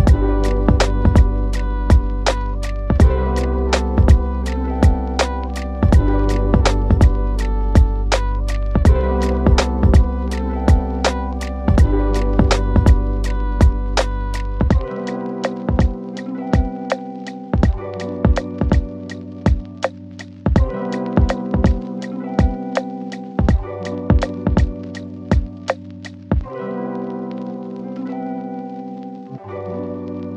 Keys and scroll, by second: 22.9 ctrl+z.